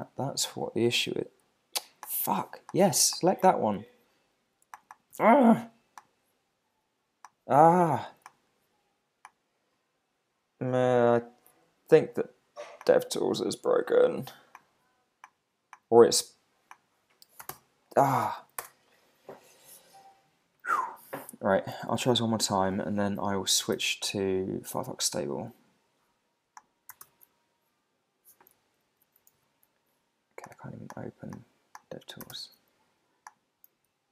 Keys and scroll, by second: 17.5 alt+super+i, 18.2 super+l, 18.6 Return, 23.7 alt+super+i, 27.0 alt+super+i, 28.5 super+`, 29.3 alt+super+i, 32.3 alt+super+i.